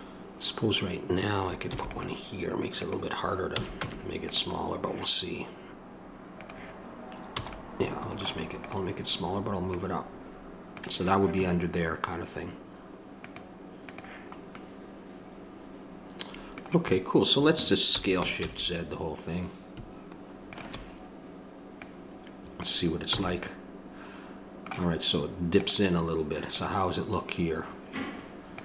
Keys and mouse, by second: 1.7 ctrl+r, 3.6 a, 3.8 Tab, 6.4 click, 7.3 a, 13.2-14.8 drag, 14.8-18.0 middle drag, 18.0 s, 21.8-26.6 drag, 23.1 a.